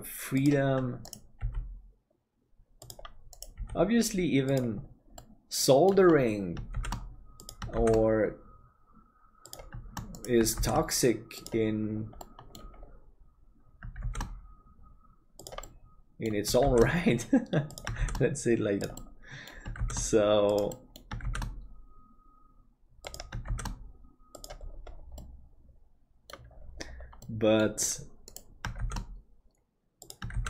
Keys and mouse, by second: 1.3 g, 3.5 g, 5.2 middle click, 6.7 shift+d, 12.2 middle click, 14.0 shift+d, 15.7 middle click, 19.1 middle click, 20.8 middle click, 25.2-26.3 middle drag, 27.4 middle click, 28.8 shift+d.